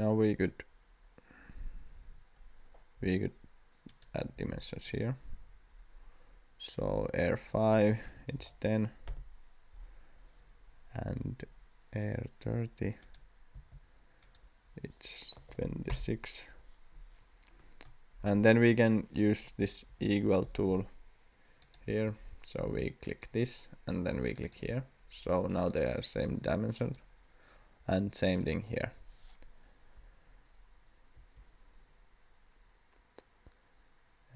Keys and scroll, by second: 4.3 d, 8.0 1, 8.4 0, 9.1 Return, 13.5 d, 15.3 2, 15.6 6, 15.9 Return, 19.9 Escape, 31.1 Escape.